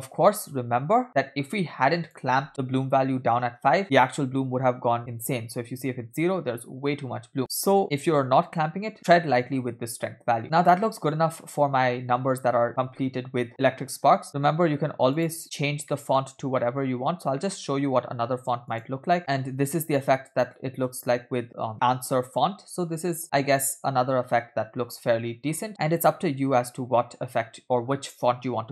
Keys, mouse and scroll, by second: 0.5-0.9 scroll down 2, 1.9 scroll down 2, 2.0 click, 3.8-5.2 drag, 7.4 click, 10.4-11.2 scroll down 3, 10.4 space, 13.9 space, 13.9-14.2 scroll down 2, 14.2-15.3 drag, 15.4-15.9 scroll down 3, 15.9 middle click, 16.6 middle click, 16.9-18.7 scroll up 7, 17.5 middle click, 18.7 click, 19.2 space.